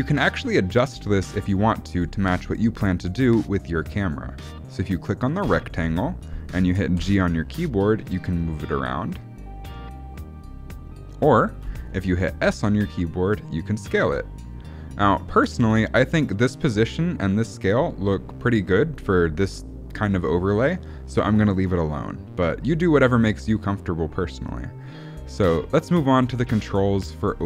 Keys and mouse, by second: 5.3 click, 6.9 g, 12.4 s.